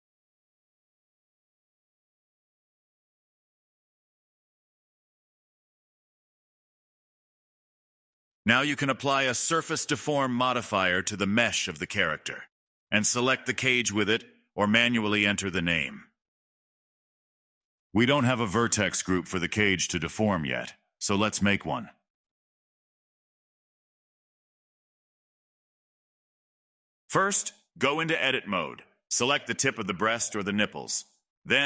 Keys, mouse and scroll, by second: 1.5 ctrl+z, 1.7-2.1 middle drag, 2.1 scroll down 1, 2.3 click, 2.8-3.3 shift+middle drag, 3.3 scroll down 1, 3.4-7.6 middle drag, 7.6 click, 8.1 middle click, 11.3 click, 13.0 click, 16.2-19.1 drag, 21.3 click, 22.5 click, 23.5 click, 25.6-26.6 middle drag, 26.6-27.7 drag, 27.7 middle click, 28.2 scroll up 1, 28.2 middle click, 29.1-29.4 scroll up 2, 29.4-30.6 middle drag, 30.6-31.2 scroll up 1, 31.2 shift+click.